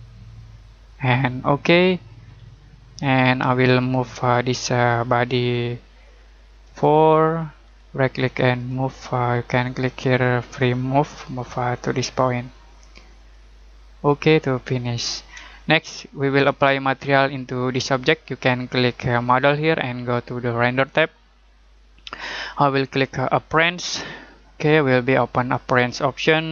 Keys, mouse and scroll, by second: 1.4 click, 2.6 middle click, 8.5 click, 14.7 middle click, 15.5 middle click, 17.9 middle click, 19.4 click, 23.8 click.